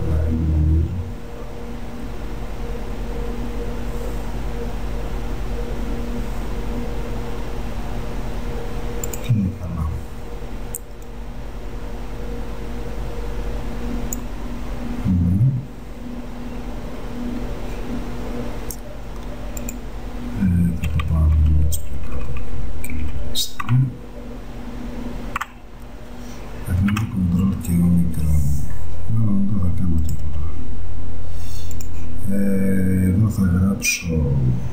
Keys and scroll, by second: 21.0 Down, 25.5 Up, 27.0 ctrl+o.